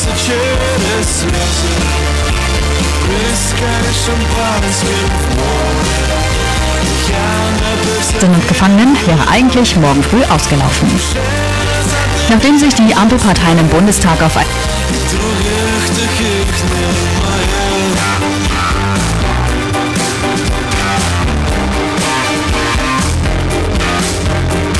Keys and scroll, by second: 14.5 Page_Down.